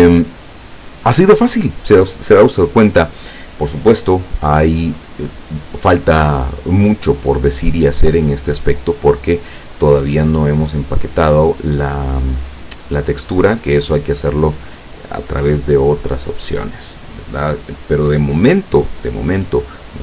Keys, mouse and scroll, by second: 9.2 click.